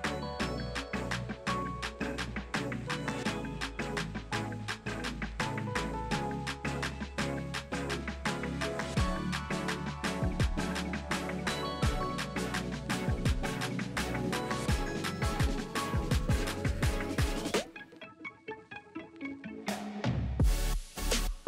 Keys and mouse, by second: 0.0 click, 0.0-1.1 middle drag, 1.1 click, 1.3-4.2 middle drag, 2.0 Tab, 4.2 click, 4.3 middle click, 4.9-12.7 drag, 6.3 middle click, 6.3 right click, 9.6 Tab, 10.5 middle click, 10.5 right click, 11.7 KP_1, 12.7 middle click, 12.8-21.4 drag.